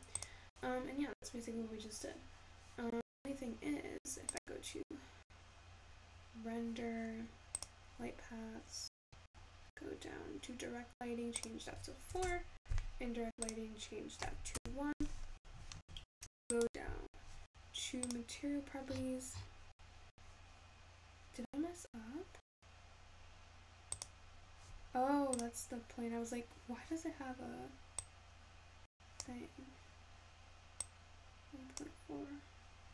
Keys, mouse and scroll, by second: 0.0-2.8 scroll up 4, 8.7-21.1 drag, 21.1-23.0 scroll up 10, 24.8 click.